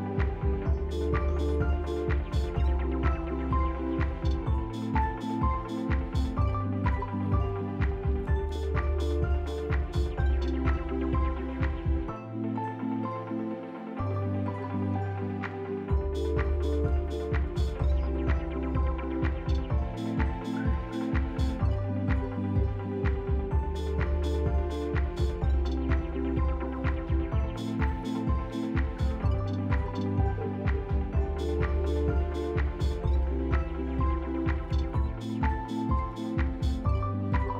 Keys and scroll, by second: 0.2 Delete, 0.6 F3, 0.9 Delete, 1.2 Delete, 1.3 ctrl+z, 1.3 F3, 1.6 Delete, 1.8 Delete, 2.3 Delete, 3.1 Delete, 3.3 F3, 5.5 Delete, 6.1 Delete, 6.1 ctrl+z, 6.9 p, 10.1 s, 11.3 s, 12.7 s, 16.6 F4, 18.0 F4, 24.1 F4, 24.6 s, 31.9 F4, 32.6 q, 33.2 ctrl+z, 36.4 Delete, 36.4 Return, 36.7 Delete, 36.7 Return.